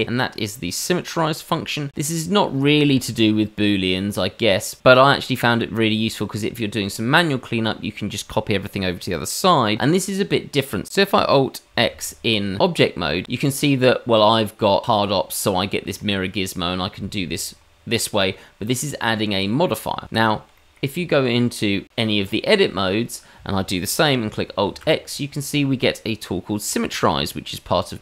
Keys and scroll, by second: 11.9 alt+x, 20.2 ctrl+z, 21.0 Tab, 24.6 alt+x.